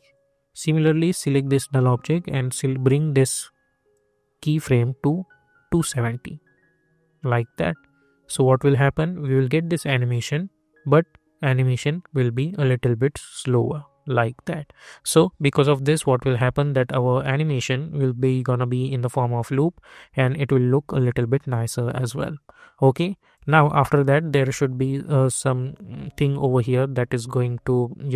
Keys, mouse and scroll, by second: 20.9 click, 27.8 -.